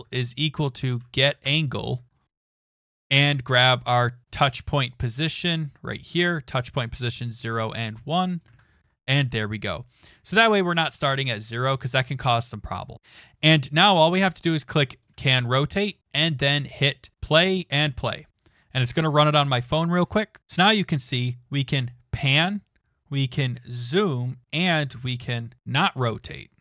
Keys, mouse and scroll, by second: 0.0-1.6 typing, 2.8 BackSpace, 2.8 BackSpace, 2.9 BackSpace, 5.8-6.5 typing, 6.8 click, 7.3 ctrl+c, 8.4 click, 8.5 ctrl+v, 10.3 click, 10.7 click, 10.8 ctrl+s, 12.9 click, 17.1 click, 17.7 click.